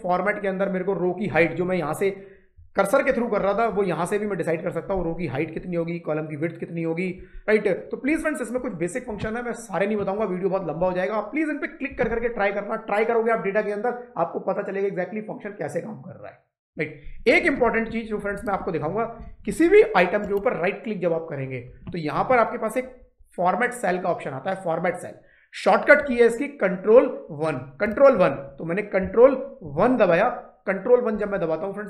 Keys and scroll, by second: 29.5 ctrl+1.